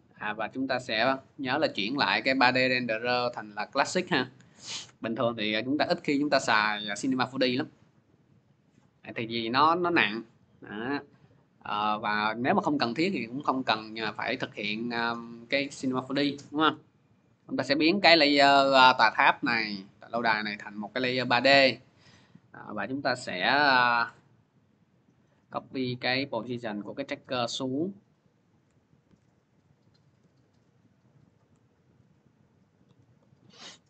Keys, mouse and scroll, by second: 0.3 click, 1.0 click, 2.4 click, 3.1 click, 3.6 click, 4.4 click, 6.4 scroll, 10.4-11.5 scroll, 14.4 click, 15.9 F4, 18.7 click, 19.8 click, 21.8 click, 21.8 middle click, 22.6 p, 23.8 click, 23.9 p, 25.4 click, 26.2 ctrl+c, 27.0 click, 27.1 ctrl+v, 27.6 click, 28.4 click, 28.9 ctrl+c, 29.7 click, 29.9 ctrl+v, 30.2 click, 31.2 click, 31.7 ctrl+c, 32.6 click, 32.7 ctrl+v, 33.0 click.